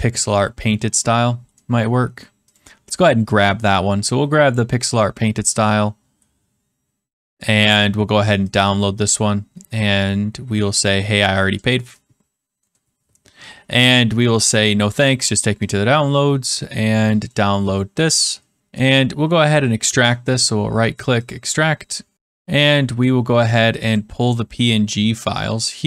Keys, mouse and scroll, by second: 2.6 click, 8.5 click, 10.8 click, 12.7-13.8 middle drag, 15.6-16.7 drag, 17.2 click, 18.8-19.9 drag, 20.0 right click, 21.2 click, 22.1 click, 23.8 click, 23.9 click.